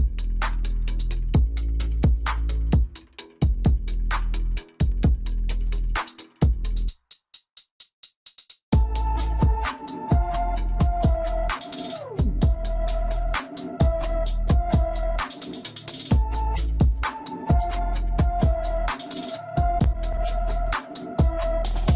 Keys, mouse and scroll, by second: 0.0-1.0 middle drag, 1.0 KP_0, 2.0-2.6 scroll down 2, 2.6 click, 3.0-4.0 scroll up 3, 4.0 scroll up 1, 4.1-12.3 middle drag, 14.6-15.2 scroll down 2, 15.2-16.1 middle drag, 16.1-18.3 scroll up 1, 18.3 ctrl+v, 19.4 scroll up 2, 19.6-20.4 middle drag, 20.4 scroll up 3, 20.6-21.4 middle drag, 21.4 g.